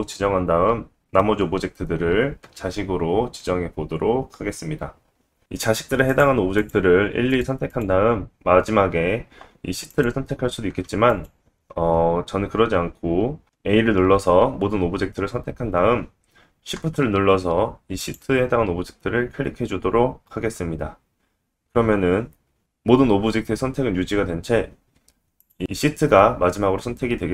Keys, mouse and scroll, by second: 4.9-5.8 scroll down 1, 6.1 shift+click, 6.6 shift+click, 7.3 shift+click, 7.7 shift+click, 9.9 shift+click, 11.1 click, 13.4 click, 13.4 a, 18.0 shift+click.